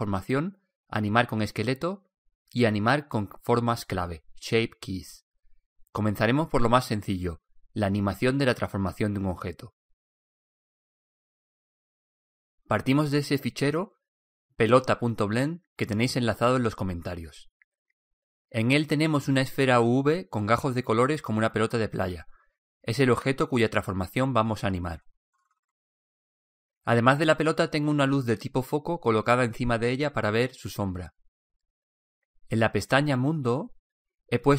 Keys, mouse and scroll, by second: 5.0 alt+a, 10.9 Escape, 20.6-22.2 right drag, 22.1-26.7 middle drag, 29.7-31.5 right drag.